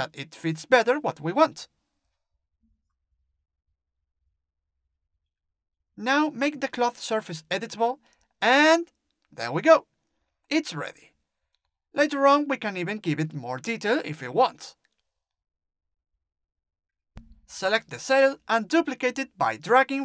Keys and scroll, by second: 12.3 Delete.